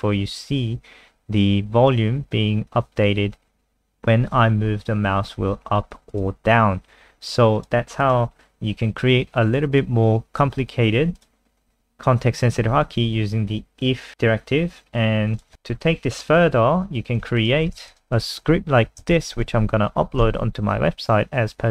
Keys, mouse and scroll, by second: 0.3-1.5 scroll up 1, 1.5-2.5 scroll up 1, 6.1 click, 8.4-9.4 scroll down 1, 9.4 scroll down 2, 12.7-13.7 scroll down 1, 15.3 click, 15.5-17.4 scroll down 7, 17.4 shift+click, 17.7 ctrl+c, 17.9 ctrl+click, 18.1 click, 18.8 Right, 19.1 ctrl+shift+End, 19.5 ctrl+v, 20.2 ctrl+s, 20.7-21.7 scroll up 3.